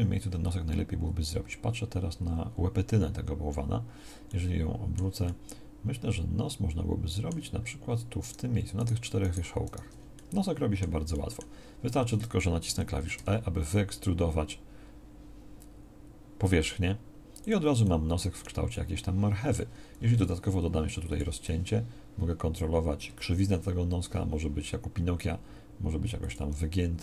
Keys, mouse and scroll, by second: 13.1 e, 20.1 ctrl+r.